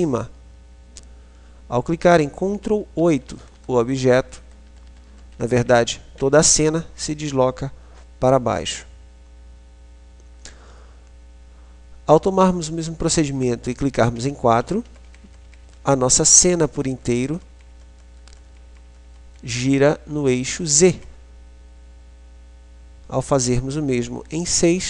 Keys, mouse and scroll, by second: 1.2-5.4 ctrl+KP_8, 11.9 KP_4, 14.7-20.9 KP_4, 24.7-24.8 KP_6.